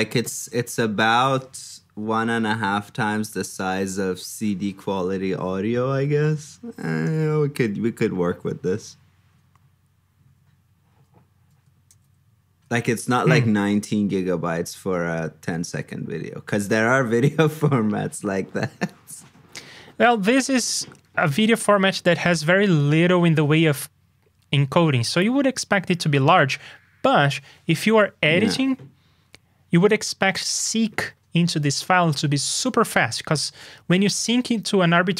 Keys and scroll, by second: 11.9 super+b, 19.4 super+b.